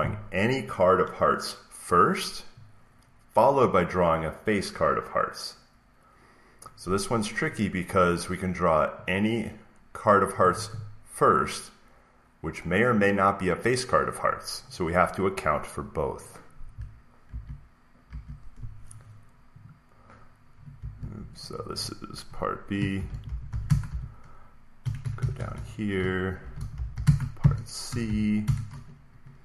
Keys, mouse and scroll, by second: 2.4-4.5 drag, 7.4-9.5 drag, 10.2-12.3 drag, 16.6 click, 17.2 alt+Tab, 17.2 click, 18.0 alt+Tab, 19.6 click, 20.9 Escape, 21.3 click, 22.6-24.3 typing, 23.0 click, 23.2-24.7 drag, 24.7 Return, 24.9 Return, 25.1 Return, 25.3 Return, 25.4 Return, 26.1-27.9 typing, 28.3 Return, 29.1 Down.